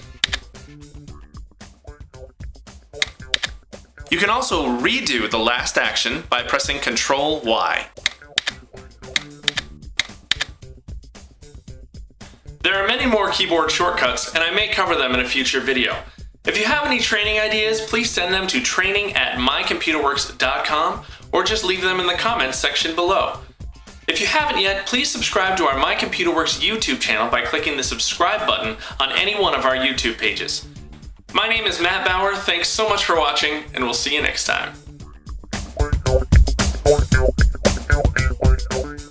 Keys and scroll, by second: 0.2 ctrl+z, 3.3 ctrl+z, 8.3 ctrl+y, 9.4 ctrl+y, 10.3 ctrl+y.